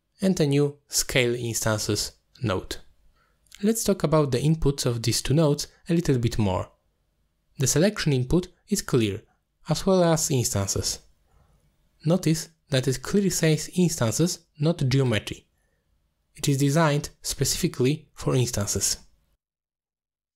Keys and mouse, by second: 0.4 click, 1.4 click, 3.2 shift+a, 7.2 click, 8.2 middle click, 8.8 click, 10.0-11.1 drag, 11.4 click, 12.7-13.6 drag, 14.0 click, 16.8 middle click, 17.6 middle click, 18.2 middle click, 19.0 middle click.